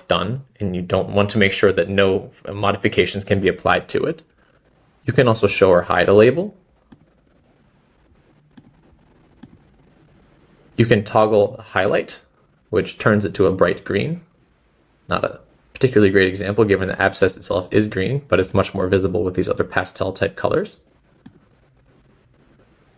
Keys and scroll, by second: 5.5 typing, 9.7-10.2 typing.